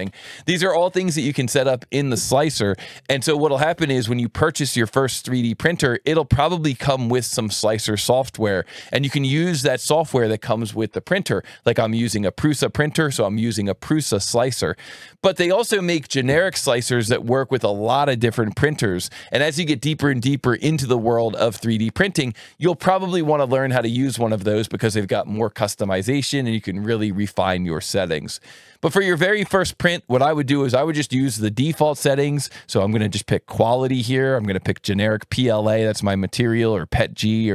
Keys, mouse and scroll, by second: 32.5 click, 34.3 click.